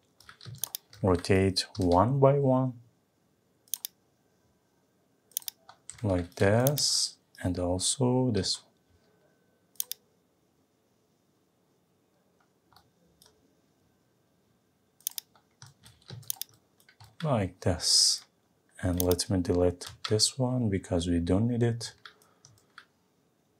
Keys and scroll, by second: 19.9 Delete.